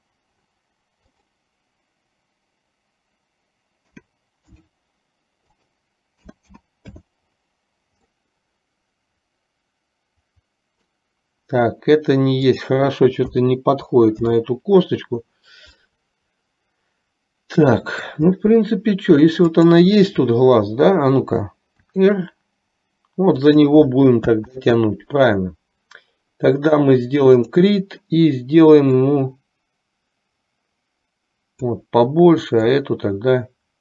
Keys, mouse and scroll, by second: 1.1-4.8 drag, 5.8-7.3 drag, 8.2-8.6 scroll up 1, 8.6-11.1 middle drag, 13.3-14.6 drag, 16.0-18.3 middle drag, 19.6 click, 22.0 r, 24.6 ctrl+z, 27.5 click, 29.1-32.0 drag, 33.2-33.8 drag.